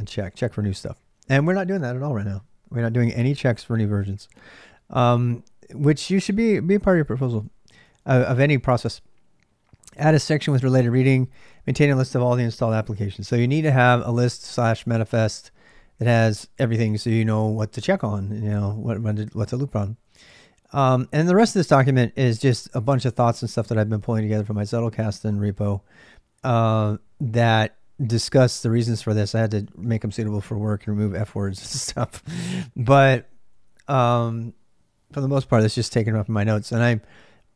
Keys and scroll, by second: 14.9-20.6 typing, 22.5 j, 22.8-37.5 j.